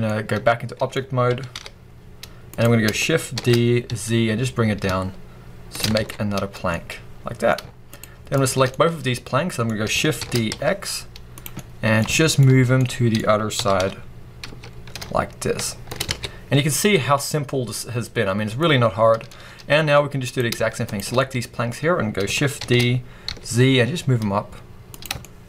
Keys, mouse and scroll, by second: 1.2 g, 2.5 click, 3.2 shift+d, 5.8 click, 5.9 alt+a, 6.3 scroll down 1, 6.6-7.7 middle drag, 7.7 shift+click, 8.2 shift+click, 8.6-11.3 middle drag, 10.1 shift+d, 11.3 click, 11.5-15.8 middle drag, 12.3-12.7 scroll up 1, 13.4 g, 15.8 click, 16.0-17.0 scroll down 2, 17.0-20.2 middle drag, 19.8-20.2 scroll up 2, 20.2 click, 20.7 shift+click, 21.0-23.5 middle drag, 22.5 shift+d, 24.9 click, 25.0-25.4 shift+scroll up 2, 25.1 shift+middle click.